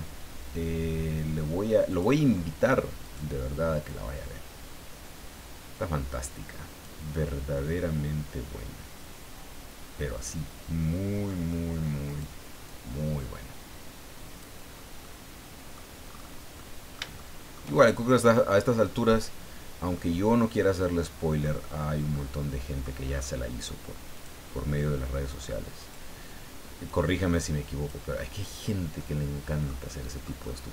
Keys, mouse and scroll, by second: 1.9 click, 3.0 right click, 3.9-7.0 drag, 7.1-7.4 scroll down 1, 7.5-11.4 middle drag, 12.0 right click, 12.6-14.6 drag, 14.7-15.0 scroll down 2, 15.0 middle click, 16.0-16.4 scroll up 2, 16.6-17.7 middle drag, 18.0 shift+scroll down 3, 18.5-20.1 middle drag, 20.6 middle click, 21.6-21.9 scroll down 1, 22.1 middle click, 23.1-23.4 scroll up 1, 24.1 click, 25.8 right click, 26.9 click, 28.5-28.8 scroll down 1, 29.0-30.4 middle drag, 30.5-30.7 middle drag.